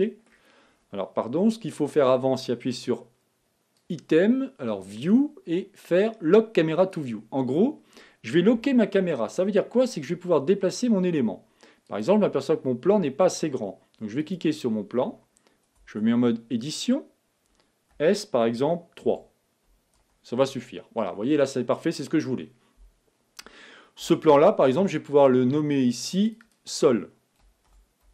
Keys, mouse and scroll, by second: 7.7 click, 8.9 KP_0, 13.2 click, 14.9 click, 16.4 Tab, 18.6 s, 24.8 Tab, 27.0 click, 27.1 click.